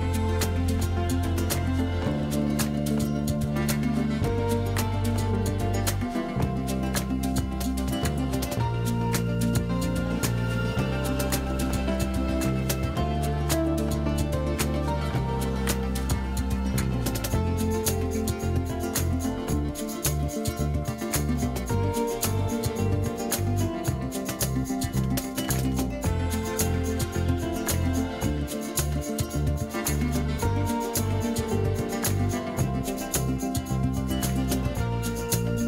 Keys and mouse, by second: 0.5 g, 1.6 middle click, 2.1 middle click, 2.1 g, 2.2 middle click, 2.4 middle click, 2.4 g, 2.9 g, 4.1 z, 4.4 shift+drag, 4.7 click, 4.8 click, 5.0 click, 5.0 middle click, 5.0 right click, 5.0 g, 5.9 click, 5.9 middle click, 5.9 right click, 6.1 shift+d, 6.2 middle click, 6.6 r, 6.7 z, 7.3 shift+middle click, 7.9 g, 8.4 g, 9.3 g, 9.7 click, 9.7 right click, 10.0 shift+click, 10.0 shift+right click, 10.3 shift+d, 10.6 r, 10.7 z, 11.8 g, 12.2 Tab, 12.3 click, 12.5 click, 12.8-15.6 typing, 12.9 Tab, 13.0 click, 13.6 shift+click, 13.8 drag, 14.5 click, 16.3 middle click, 16.5 shift+middle click, 16.6 middle click, 16.8 g, 17.3 middle drag, 17.7 shift+middle click, 17.8 middle click, 18.2-20.7 typing, 18.2 middle click, 20.1 drag, 20.3 middle drag, 20.9 click, 21.1 shift+click, 21.3 Tab, 21.5 ctrl+r, 21.8 click, 22.0 3, 22.3 alt+e, 23.5 s, 23.8 Tab, 23.9 click, 24.6-28.9 typing, 24.7 click, 26.3 ctrl+click, 26.6 Tab, 26.7 click, 28.3 Escape, 28.4 click, 29.9 Tab, 30.1-34.6 typing, 30.5 Tab, 30.6 shift+middle drag, 33.3 click, 33.9 click, 34.3 shift+click, 35.4 click, 35.4 Tab.